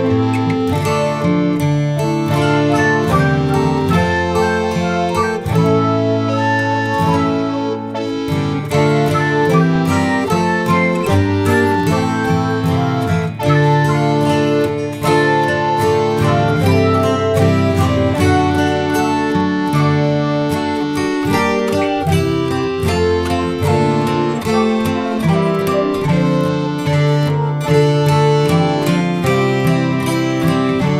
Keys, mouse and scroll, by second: 0.6 click, 1.6 click, 2.3-5.4 drag, 5.9 g, 8.4-8.9 scroll down 1, 8.9-9.2 middle drag, 9.2 scroll up 1, 9.4-10.9 scroll down 1, 10.9 g, 13.7 s, 17.2 KP_0, 17.8-18.4 scroll up 6, 18.6 scroll down 3, 18.7-22.4 typing, 19.6 scroll up 1, 19.9 middle drag, 19.9 scroll down 6, 20.0 middle click, 20.5 ctrl+s, 20.6 click, 20.6 middle click, 20.6 scroll down 1, 20.7 middle click, 20.8 middle click, 21.4 ctrl+s, 21.8 ctrl+s, 23.0 scroll up 5, 23.2 ctrl+s, 23.3 scroll down 1, 23.4 middle click, 23.8-25.2 typing, 23.9 ctrl+s, 24.3 scroll down 5, 24.4 middle click, 24.5 middle drag, 25.3 scroll up 6, 25.3 click, 26.2 click, 27.1 shift+a, 29.6 ctrl+z, 30.5 g.